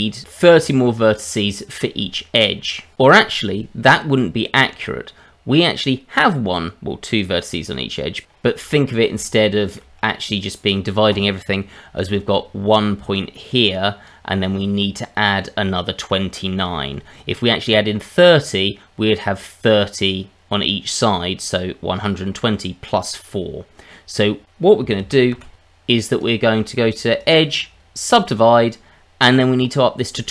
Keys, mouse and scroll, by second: 4.5-6.0 scroll up 1, 8.3-9.1 scroll up 4, 9.2 shift+middle click, 10.1 middle click, 11.9 click, 13.1 click, 14.4 click, 25.0 ctrl+z, 25.3 ctrl+z, 26.1 click, 27.2 click.